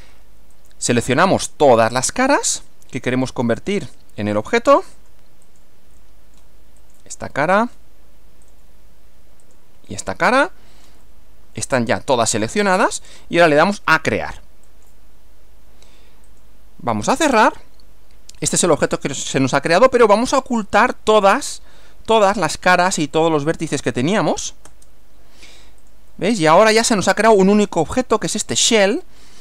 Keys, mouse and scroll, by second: 0.5 click, 1.3 ctrl+click, 2.1 ctrl+middle click, 3.5 ctrl+click, 4.5 ctrl+middle click, 5.4 ctrl+click, 6.0 ctrl+middle click, 6.8 ctrl+click, 7.3 ctrl+middle click, 8.5 ctrl+click, 9.4 ctrl+click, 10.1-11.7 ctrl+middle drag, 14.7 click, 16.3 click, 17.5-19.0 middle drag, 20.7 click, 23.2 shift+click, 24.7 space, 25.8 click, 26.1-27.7 middle drag, 29.0-29.4 middle drag.